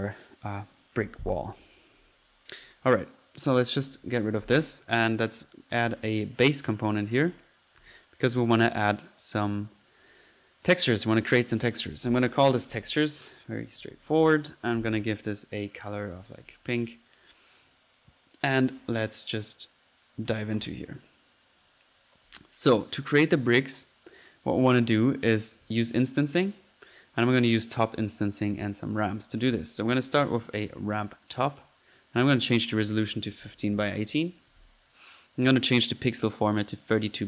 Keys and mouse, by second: 2.0 Delete, 2.6 click, 3.4 click, 4.3-4.9 middle drag, 5.2 click, 5.6-6.3 typing, 6.5-6.8 drag, 7.3-7.7 drag, 7.8-8.2 drag, 8.6 click, 9.2 click, 9.7 click, 9.9 click, 11.5 click, 14.6-15.4 typing, 16.4 drag, 16.7 typing, 16.9-19.1 drag, 20.3 middle click, 21.4 click, 22.3 click, 25.7 click, 26.2 click, 27.4-28.6 middle drag, 28.6 click, 28.6-29.7 typing, 29.9 click, 30.6-31.0 drag, 31.1 click, 32.0-32.3 drag, 32.5 click, 34.9-35.3 drag, 36.2-36.6 drag.